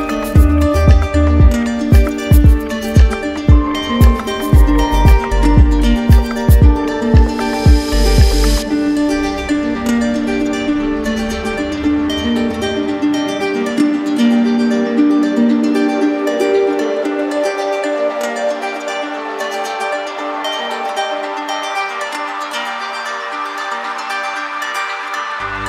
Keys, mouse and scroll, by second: 0.4 ctrl+click, 4.3 ctrl+click, 5.3 shift+click, 5.5 ctrl+z, 10.9-12.2 drag, 15.6-18.3 drag, 18.9-20.0 shift+drag, 19.1 ctrl+z, 22.6 shift+click, 24.1 shift+click, 24.5 ctrl+click.